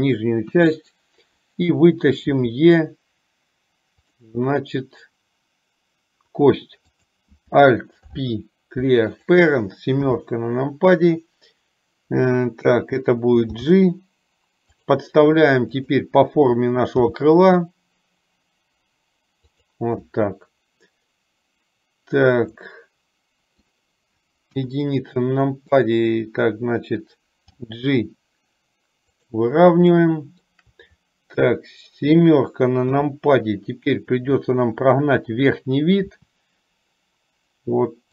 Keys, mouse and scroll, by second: 0.7 KP_1, 2.4 e, 7.0 click, 8.2 alt+p, 10.2 KP_7, 13.6 g, 15.7 click, 17.1 g, 22.7-23.9 middle drag, 24.6 KP_1, 27.6 g, 30.1 middle click, 33.0 KP_7, 36.2 e.